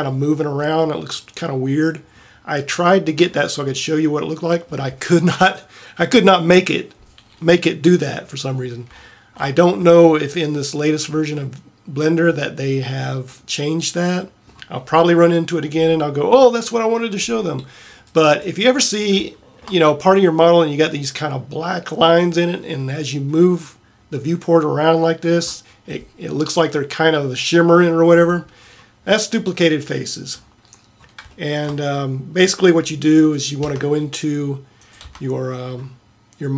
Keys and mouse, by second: 16.7-18.2 middle drag, 28.8-29.3 middle drag, 33.4 right click, 33.7 Tab, 35.1 Tab.